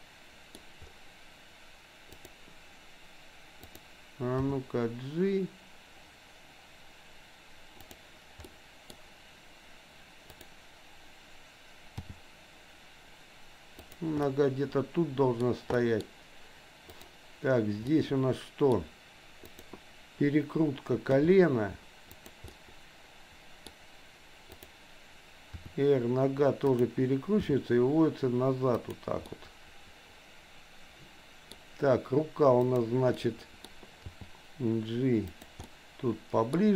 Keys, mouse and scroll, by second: 2.2 click, 3.6 click, 4.5 g, 8.5 middle click, 10.2 click, 12.0 g, 14.2-15.4 middle drag, 15.7 middle click, 17.0 click, 17.9 middle click, 19.5 click, 21.1 g, 22.6 scroll up 1, 22.7-23.7 middle drag, 24.5 click, 25.6 r, 27.5 g, 29.4-31.6 middle drag, 32.6 click, 33.1 middle click, 34.1 g, 35.7 middle click.